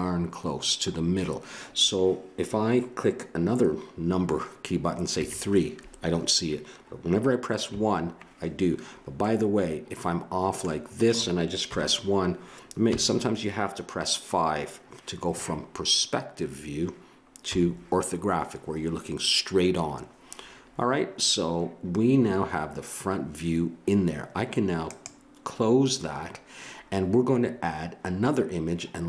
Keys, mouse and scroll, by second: 5.1 KP_3, 7.7 KP_1, 11.7 KP_1, 12.9 KP_5, 17.4 KP_5, 24.8-26.8 drag.